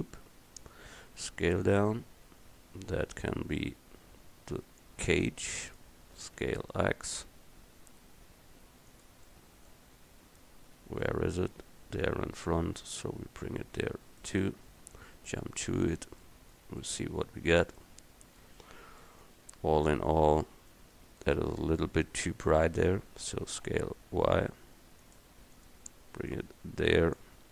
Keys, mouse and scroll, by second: 1.0 s, 6.2 s, 9.7 middle click, 10.5-11.0 middle drag, 11.1-13.0 middle drag, 15.3 KP_Decimal, 21.3-23.2 right drag, 23.5 s.